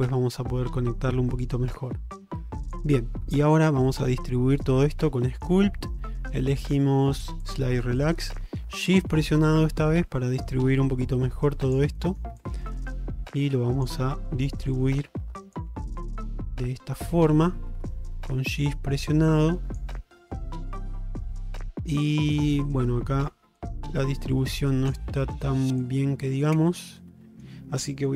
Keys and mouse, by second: 3.2 middle click, 3.9 ctrl+Tab, 5.3 middle click, 8.1-11.8 shift+drag, 12.1 middle click, 12.5-13.9 shift+drag, 14.2 shift+middle click, 14.6-15.6 shift+drag, 15.8 middle click, 16.3-18.6 shift+drag, 18.8 shift+middle click, 19.3 shift+click, 20.0 middle click, 20.8-23.3 middle drag, 23.6-25.0 shift+drag, 25.3 middle click, 25.9-26.9 shift+drag, 27.0 middle click.